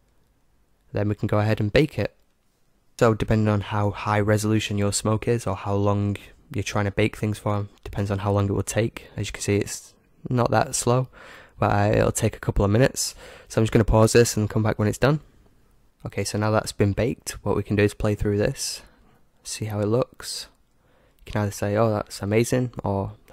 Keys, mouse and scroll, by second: 2.0-15.1 drag, 18.5-20.4 drag.